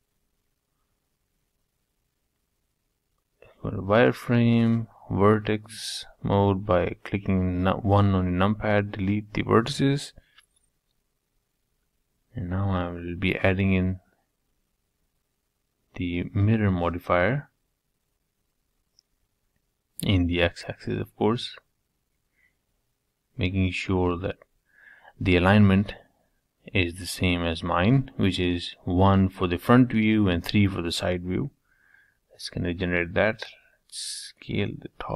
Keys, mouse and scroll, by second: 0.6 scroll down 3, 1.1 z, 2.8 1, 3.2-4.7 middle drag, 4.7 click, 6.4 x, 9.4 Tab, 9.9-12.0 middle drag, 12.0 z, 12.8-14.8 middle drag, 15.1 click, 15.6-16.1 drag, 18.0-19.9 middle drag, 21.4 click, 22.0 middle click, 22.4-23.2 scroll up 2, 24.2 Tab, 24.6-26.4 middle drag, 26.8 c, 29.0-32.8 middle drag, 33.6-35.1 middle drag.